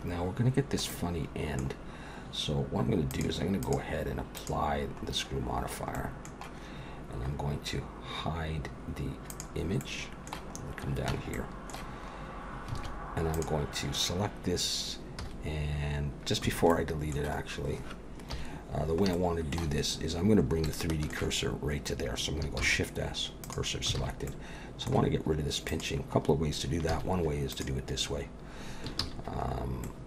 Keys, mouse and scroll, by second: 0.5 scroll down 1, 0.9 middle click, 3.1 click, 3.6 click, 4.4 click, 5.1-5.5 scroll up 1, 5.5 scroll down 1, 5.6-5.9 scroll down 1, 5.9 middle click, 9.3 click, 9.8 middle click, 10.6-11.2 scroll up 1, 11.2 Tab, 11.2 scroll up 1, 11.3 middle click, 12.0-12.4 scroll up 2, 12.8 alt+a, 13.3 click, 15.2 x, 16.7 middle click, 17.4-18.2 scroll down 2, 18.4 KP_1, 19.1 shift+middle click, 19.8-20.4 scroll up 1, 20.4 scroll up 3, 20.7 shift+middle click, 21.5-22.3 scroll up 1, 22.6 shift+s, 24.0 alt+a, 24.3 middle click, 25.7 click, 26.9 x, 29.0 ctrl+z, 29.5-30.0 scroll up 2, 29.8 middle click.